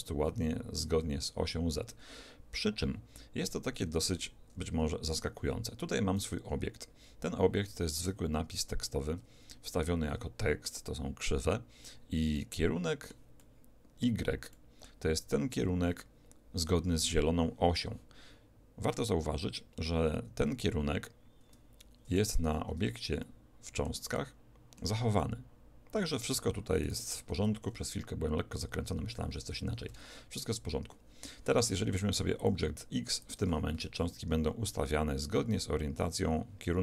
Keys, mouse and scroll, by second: 3.9 Escape, 5.2 2, 6.6-8.0 right drag, 8.0 Tab, 9.1 Tab, 12.4-16.3 middle drag, 22.4 1, 23.2-26.8 middle drag, 26.8-29.1 right drag, 30.0 alt+a, 31.3 Escape, 32.4 click, 33.8 alt+a.